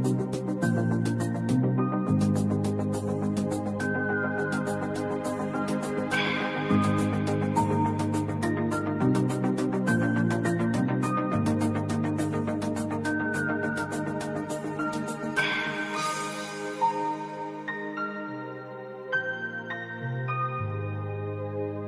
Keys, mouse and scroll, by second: 0.9 click, 2.6-5.9 drag, 5.9 shift+click, 8.2 click, 10.3-12.3 drag, 12.3 ctrl+2, 12.7 click, 13.4 alt+scroll down 1, 13.6 space, 13.7 click, 13.8 space, 14.4 click, 14.9 space, 15.1 click, 15.2 space, 15.5 click, 15.6 space, 16.1 click, 16.3 space, 16.5 click, 17.5 v, 18.0-21.0 drag.